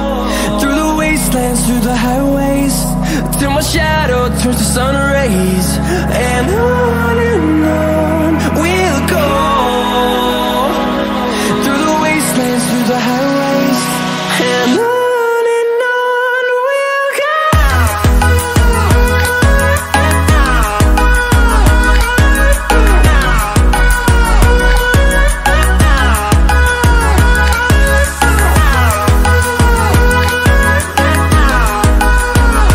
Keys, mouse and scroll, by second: 0.2-1.5 scroll down 1, 1.6-6.1 drag, 6.3-7.7 drag, 7.7 scroll up 1, 9.3-11.8 drag, 11.8-15.9 drag, 17.8 click, 18.2 ctrl+-, 20.6 scroll up 1, 24.2 ctrl+=, 25.9 scroll up 1, 28.4 click, 30.3 click.